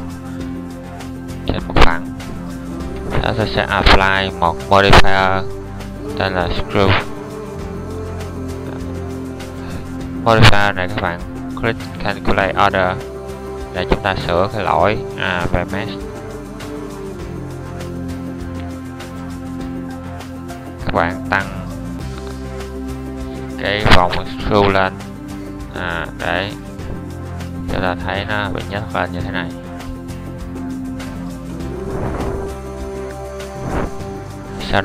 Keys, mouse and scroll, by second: 31.8-33.1 middle drag.